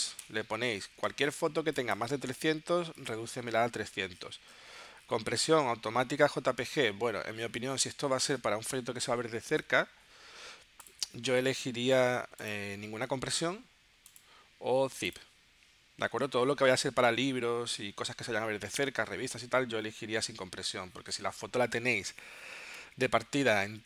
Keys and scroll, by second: 0.7 0.